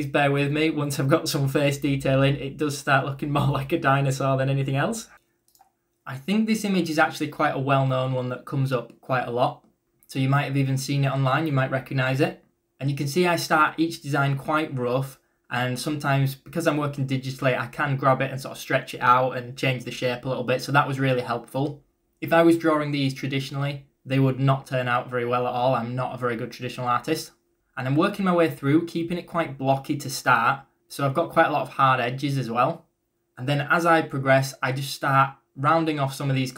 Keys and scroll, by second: 0.8 ctrl+z, 1.1-2.6 typing, 4.0 b, 11.7-14.2 typing, 16.0 ctrl+z, 18.1-20.7 typing, 21.8-23.1 typing, 24.8-26.5 typing.